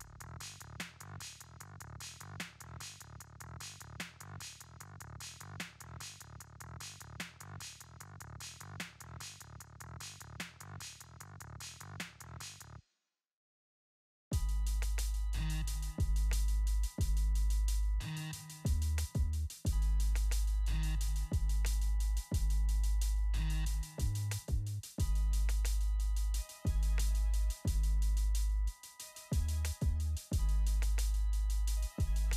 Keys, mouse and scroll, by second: 4.0 click, 6.1 right click, 7.3 click, 14.4 click, 18.2 click, 18.6 alt+scroll down 1, 19.7-20.3 scroll down 1, 20.4-21.2 alt+scroll up 2, 21.2 click, 22.2-22.9 scroll up 3, 22.9 t, 23.7 click, 25.4 2, 26.7 click, 29.3 alt+scroll down 1, 30.0 scroll down 1, 31.1-31.5 scroll down 1, 31.5-32.3 alt+scroll up 2.